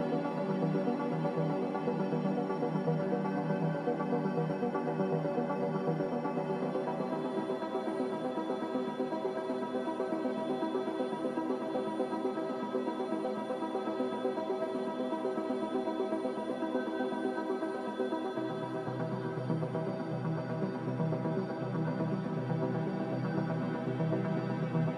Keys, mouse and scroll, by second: 2.8-3.6 typing, 15.1 click, 15.6 1, 15.8 Return, 16.4 click, 19.8 click.